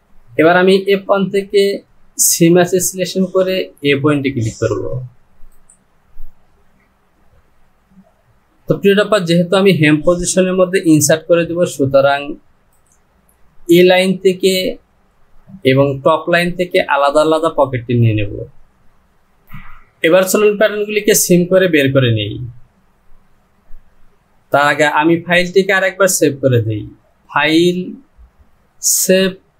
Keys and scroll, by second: 11.0 ctrl+z, 19.5 Home.